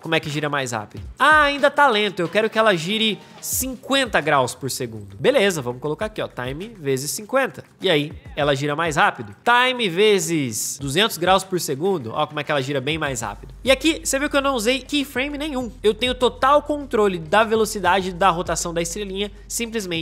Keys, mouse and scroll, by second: 7.6 space, 10.7 space.